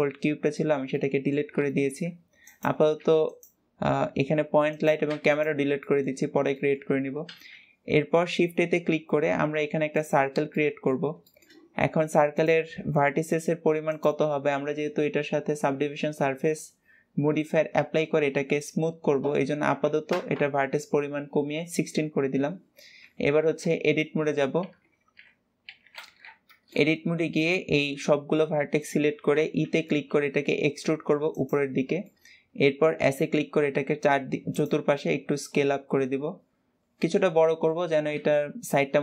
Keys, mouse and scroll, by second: 2.3 click, 4.6 click, 5.7 shift+middle click, 6.0-6.4 scroll up 2, 6.4-6.8 shift+middle drag, 6.8 scroll up 2, 7.1 shift+a, 10.4-12.2 middle drag, 12.2-16.9 drag, 22.9 Escape, 25.9 Tab, 26.4-29.0 middle drag, 29.0 e, 31.6 shift+middle click, 32.2-32.9 scroll up 1, 32.9 s, 34.8-37.8 middle drag.